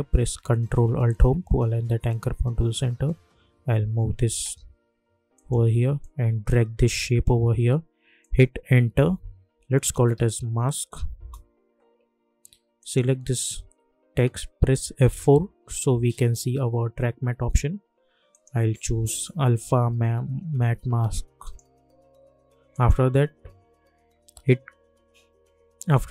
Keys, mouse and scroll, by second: 1.0 ctrl+alt+Home, 3.1 Left, 5.3-8.2 drag, 8.5 Return, 9.5-10.8 typing, 11.2 Return, 12.8 click, 15.0 F4, 18.3 click, 21.4 click.